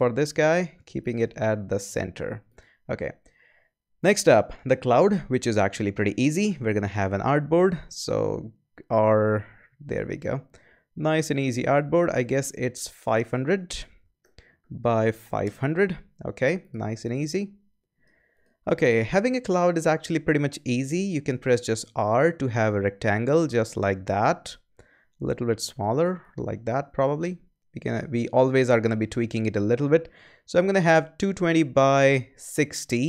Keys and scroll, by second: 6.4 a, 13.7-15.4 typing, 21.2 r.